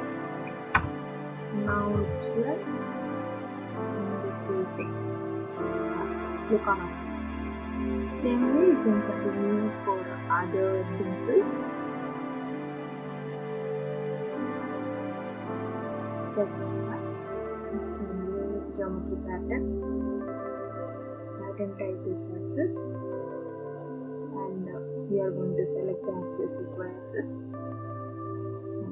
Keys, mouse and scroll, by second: 0.7 BackSpace, 1.9 typing, 4.4 click, 6.5 click, 14.1 click, 18.0 click, 18.9 click, 20.9 click, 22.1 click, 26.2 click, 28.3 click.